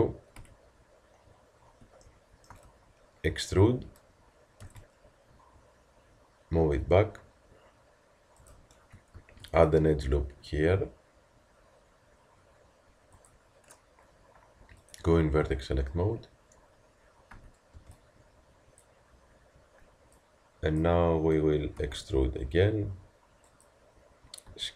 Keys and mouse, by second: 0.4 z, 9.2 ctrl+r, 14.8-17.3 drag, 17.3 a, 20.2-23.5 drag, 21.8 e.